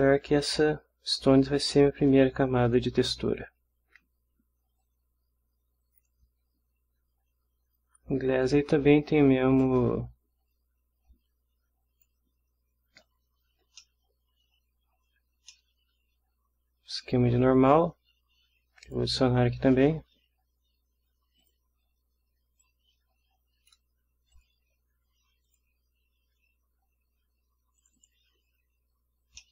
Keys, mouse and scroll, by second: 1.1-2.9 drag, 4.8-6.2 drag, 8.3-9.8 drag, 11.3-12.2 drag, 13.3-13.6 scroll down 1, 13.6 ctrl+scroll up 1, 13.7 ctrl+scroll down 1, 13.8-15.1 ctrl+middle drag, 15.3 ctrl+scroll down 1, 15.3 ctrl+scroll up 1, 15.5-17.3 ctrl+middle drag, 17.3 scroll down 1, 17.4 scroll up 1, 18.8 click, 21.4 click, 22.6-23.9 drag, 24.3 click, 25.5 click, 27.8 click, 29.4-29.5 middle drag.